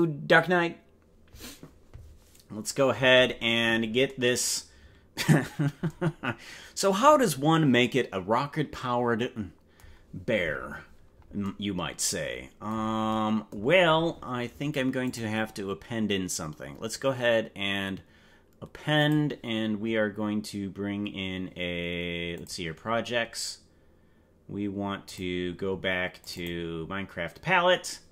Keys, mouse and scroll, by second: 15.0-19.2 drag.